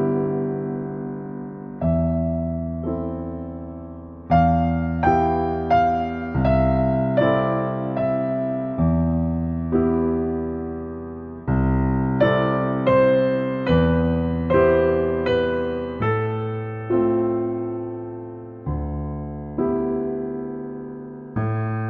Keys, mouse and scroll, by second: 7.2 click, 7.7 middle click, 8.2 s, 8.9-9.7 scroll down 6, 9.0 middle click, 9.7 shift+middle click, 10.3 g, 11.1 middle click, 11.2 scroll up 1, 11.4 shift+middle click, 11.7 shift+a, 13.4-14.7 drag, 14.7 scroll up 4, 15.0-16.2 shift+middle drag, 16.2-18.5 drag.